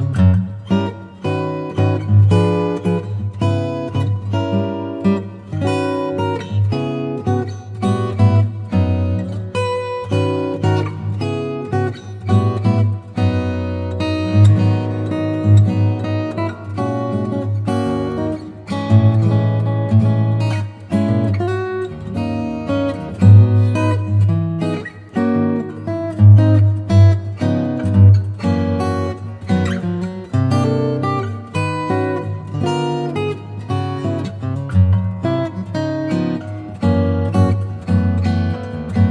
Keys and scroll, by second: 0.0 space, 0.5 space, 1.3 space, 2.6 space, 3.9 super+space, 5.7 space, 9.7 v, 21.1 super+i, 22.4 b, 23.8 ], 25.2 space, 25.7 5, 26.7 ], 27.4 space, 28.6 space, 29.3 [, 30.1 ], 30.6 [, 31.8 ], 32.7 [, 34.0 [, 35.0 ], 35.6 [, 36.4 space, 37.4 super+z, 37.8 space, 39.0 space.